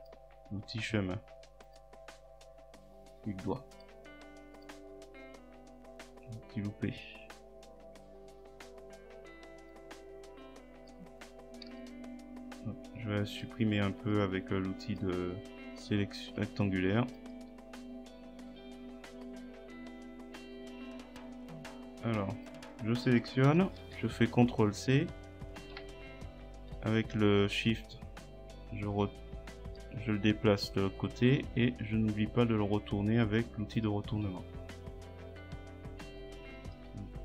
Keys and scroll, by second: 11.7 Delete, 16.3 Delete, 23.6 ctrl+c, 24.0 ctrl+v, 26.6 shift+Right, 36.9 shift+Left.